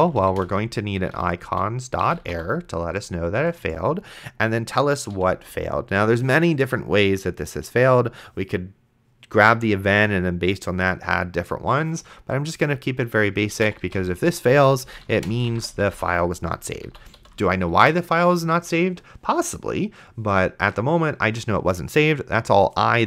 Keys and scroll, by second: 0.0-2.8 typing, 5.1 :, 13.4-17.2 typing, 16.9 End, 18.0 ctrl+s.